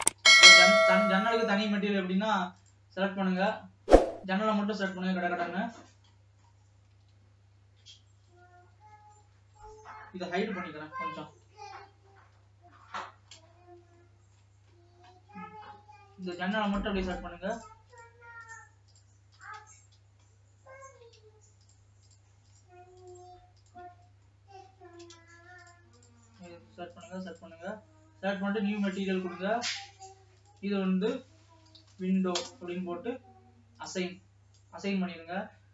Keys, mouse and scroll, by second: 0.5-1.6 scroll up 7, 1.6 scroll down 2, 1.9 middle click, 2.8 click, 3.3 Tab, 3.6 click, 4.6 scroll down 2, 5.4 scroll up 2, 5.8-6.4 scroll down 6, 6.4 middle click, 7.1 alt+a, 8.4-11.6 typing, 13.4-14.0 scroll up 7, 14.1-15.4 shift+middle drag, 15.4-16.6 scroll up 1, 17.0-18.1 shift+drag, 18.1-20.4 shift+drag, 20.4-21.8 shift+middle drag, 21.8-24.5 shift+drag, 24.5-25.9 shift+middle drag, 25.9-28.1 shift+drag, 28.1-29.0 scroll down 2, 29.0-35.7 drag.